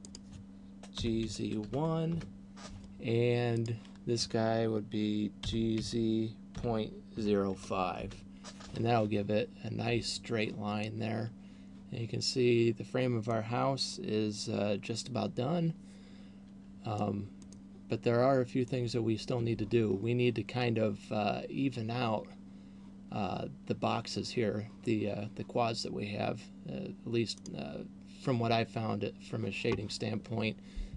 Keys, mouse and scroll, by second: 0.2 right click, 1.2 g, 3.7 right click, 5.7 g, 11.0 middle click, 17.5 middle click, 27.7 right click.